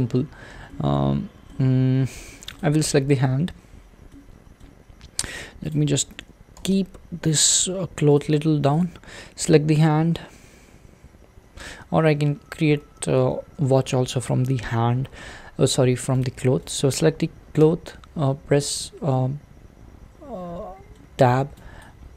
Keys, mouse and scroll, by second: 0.7-2.6 shift+middle drag, 2.6 click, 3.5-4.1 scroll down 1, 4.1-5.7 middle drag, 5.7 click, 6.6 g, 8.4 click, 8.8 click, 9.5 Tab, 11.8 z, 12.2 z, 13.0 z, 13.3 z, 16.2 click, 16.7 click, 17.6 Tab, 19.1-21.3 middle drag, 21.3-21.8 scroll up 2, 21.8 click.